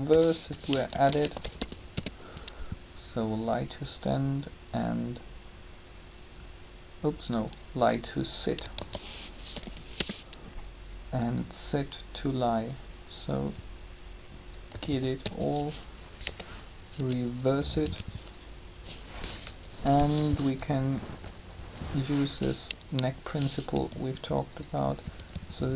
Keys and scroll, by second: 0.0-1.5 typing, 1.9 Return, 8.6-9.5 typing, 9.9 Return, 14.7 typing, 16.3 -, 19.5 3, 23.7 shift+r, 25.2 r.